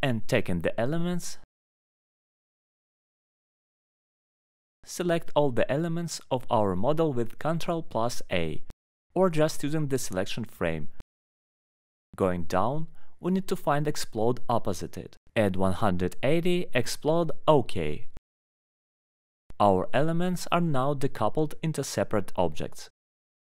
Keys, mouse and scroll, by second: 0.8 click, 2.9 click, 3.3 click, 4.4 middle click, 5.6 click, 8.2 click, 9.5 click, 13.9 click, 15.0 click, 17.3 click, 18.6 click, 20.3 click, 20.7 click, 21.1 click, 22.1 click, 23.0 click.